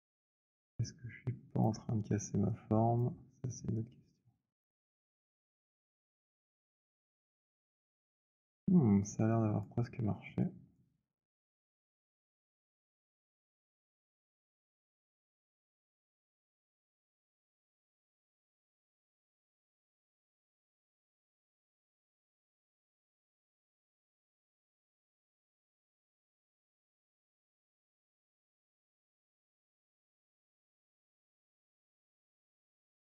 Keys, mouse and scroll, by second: 1.6 click, 2.8 click, 3.9 click, 8.1 alt+click, 9.3 click, 10.6 click, 11.7 click, 13.4 click, 15.1 click, 19.2 click, 20.8 click, 22.4 click, 26.3 click, 31.4 alt+click, 32.6 click.